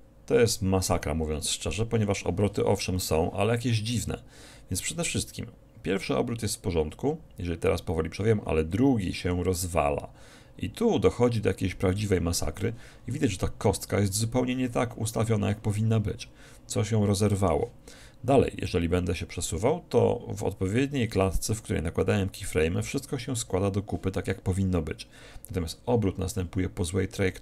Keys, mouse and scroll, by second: 1.5 Escape, 5.0-6.6 drag, 13.3-15.1 middle drag, 18.7-20.7 drag.